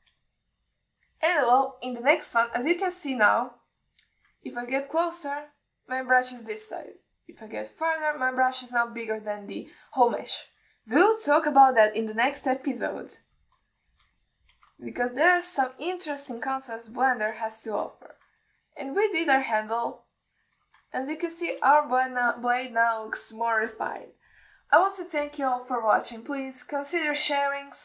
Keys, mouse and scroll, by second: 0.4 click, 1.2 alt+middle click, 1.5 alt+shift+middle click, 2.2 click, 3.2 middle click, 4.2 ctrl+alt+middle click, 5.1 middle click, 5.7 ctrl+middle click, 8.1 ctrl+alt+middle click, 8.7 ctrl+alt+middle click, 12.7 ctrl+alt+middle click, 13.6 middle click, 14.4 alt+middle click, 14.9 shift+middle click, 15.4 shift+click, 16.1 alt+shift+middle click, 16.9 shift+click, 17.8 ctrl+middle drag, 18.2 alt+middle drag, 18.8 shift+middle drag, 19.2 ctrl+alt+middle drag, 19.8 alt+middle drag, 20.2-20.9 alt+middle drag, 21.3-21.8 alt+shift+middle drag, 22.2-22.6 ctrl+alt+middle drag, 23.0-23.4 alt+shift+middle drag, 24.4-25.7 drag.